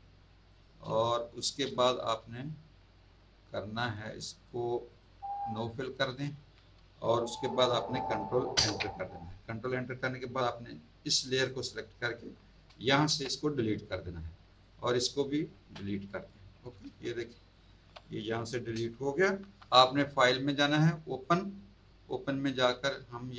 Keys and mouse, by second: 0.4 click, 0.8 space, 1.0 click, 4.8 click, 5.9 click, 8.5 ctrl+Return, 11.3 click, 13.0 Delete, 14.5 click, 15.5 Delete, 16.7 z, 17.2 alt+click, 17.5 alt+click, 19.4 ctrl+d, 20.1 click, 21.1 click.